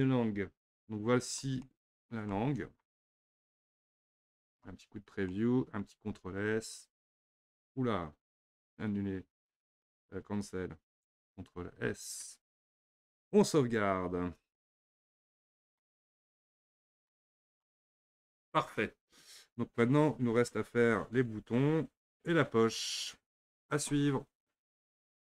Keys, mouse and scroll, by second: 1.2-1.5 scroll down 1, 1.7-4.5 shift+middle drag, 4.5 click, 5.3-6.8 middle drag, 6.8 ctrl+q, 12.3 ctrl+s, 14.4 n, 15.1-17.5 middle drag, 17.5 click.